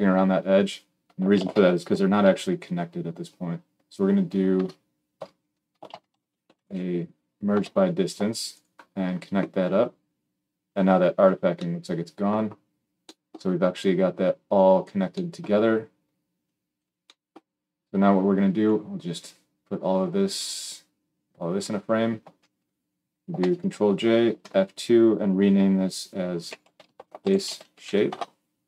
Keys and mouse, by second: 1.3 shift+a, 5.8 shift+a, 14.5-28.6 drag, 23.3 ctrl+j, 24.3 F2.